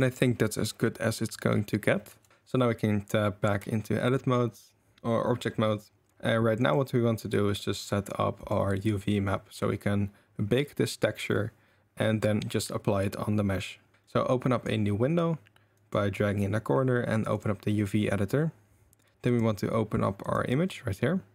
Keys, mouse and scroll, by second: 2.1 Tab, 6.1 ctrl+s, 6.6 click, 8.4 click, 13.9 click, 14.1 middle click, 15.8-17.4 middle drag, 19.3-20.7 middle drag.